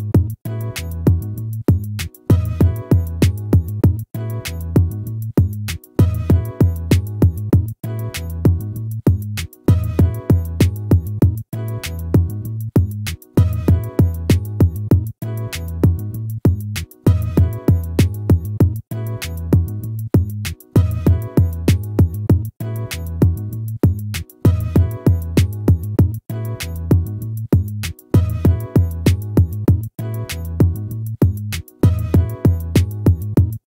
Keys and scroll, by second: 12.2 ctrl+-, 16.6 ctrl++, 18.7 ctrl++.